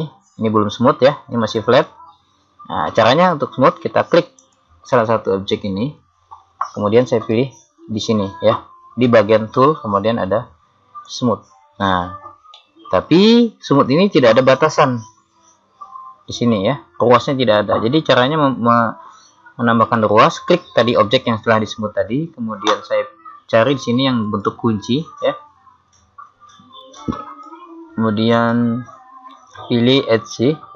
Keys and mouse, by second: 3.2-4.5 middle drag, 4.5 right click, 11.1 click, 12.8 middle click, 13.5-15.3 middle drag, 24.3 click, 27.0-30.1 drag.